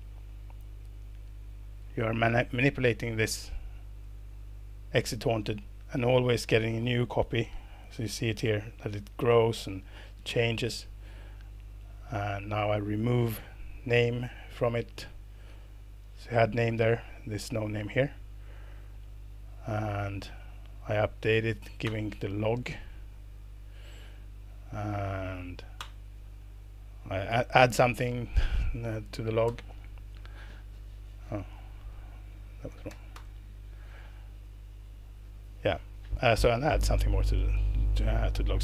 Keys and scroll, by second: 1.8 ctrl+alt+Return, 4.0 ctrl+alt+Return, 13.0 ctrl+alt+Return, 21.8 ctrl+alt+Return, 25.8 ctrl+alt+Return, 29.4 ctrl+alt+Return, 32.3 Right, 33.1 ctrl+alt+Return.